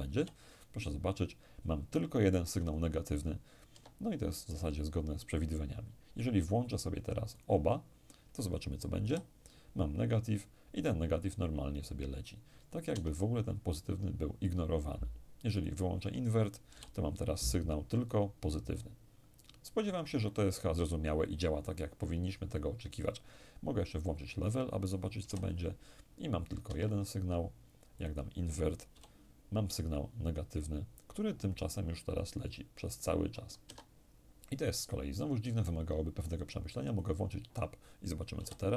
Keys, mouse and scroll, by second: 3.3 Escape, 7.0 click, 8.7 p, 12.5 Escape, 15.2 click, 16.3 p, 19.7 Escape, 23.6 click, 24.9 p, 26.3 Escape, 27.6 click, 28.5 p, 33.3 Escape, 36.6 click, 38.0 p.